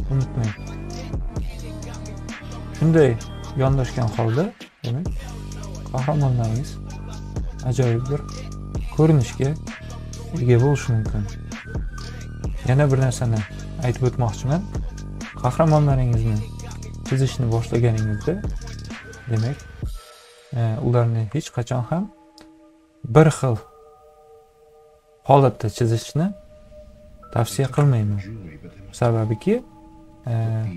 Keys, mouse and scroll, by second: 1.4 click, 3.2 click, 5.4-6.8 drag, 7.7-10.9 drag, 11.4 click, 14.6 ctrl+a, 15.3-18.0 drag, 18.3 ctrl+click, 20.6-22.8 drag, 24.9 ctrl+z, 28.6-30.3 drag.